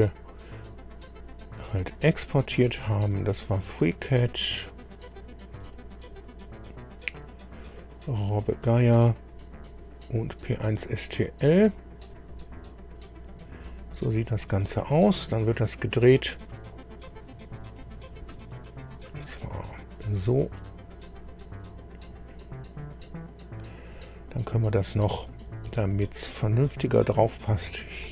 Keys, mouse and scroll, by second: 3.0 click, 4.0-5.1 scroll down 6, 5.6-5.9 scroll down 2, 6.1-6.5 scroll down 2, 7.9 click, 10.4 click, 12.0 click, 13.6-14.0 scroll down 2, 14.6 click, 16.9 click, 17.8-19.2 middle drag, 18.3 click, 20.0-23.0 drag, 24.5-26.4 right drag, 28.0-28.1 drag.